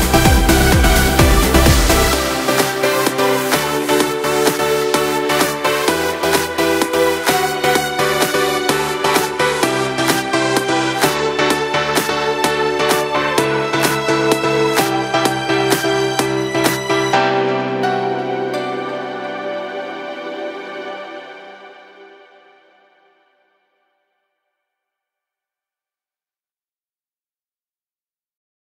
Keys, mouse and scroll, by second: 0.6 space, 11.9 click.